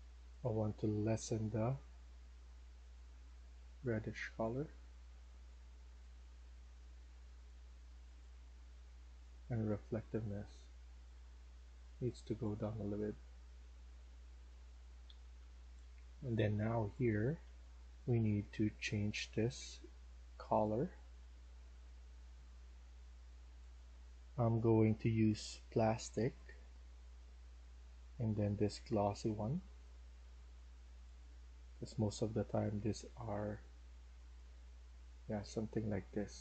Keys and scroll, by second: 2.9-3.6 typing, 11.6-13.6 typing, 14.8-18.2 typing, 19.3-20.1 typing, 24.4 s.